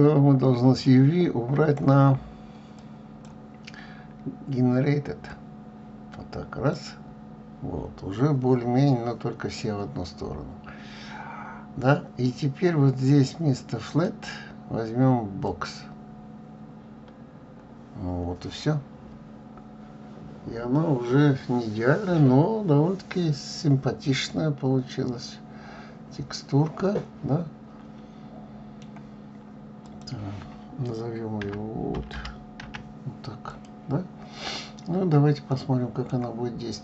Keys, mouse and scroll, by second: 0.8-1.7 drag, 3.3 click, 5.1 click, 15.5-24.3 drag, 24.3-28.8 middle drag, 33.5 scroll, 35.8-36.8 middle drag.